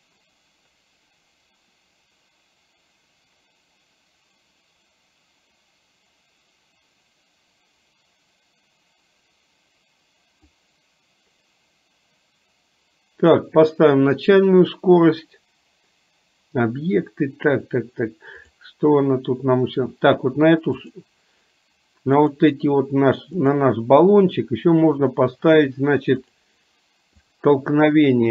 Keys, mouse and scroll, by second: 10.8-13.6 drag, 18.6 drag, 22.4 click, 27.4 click.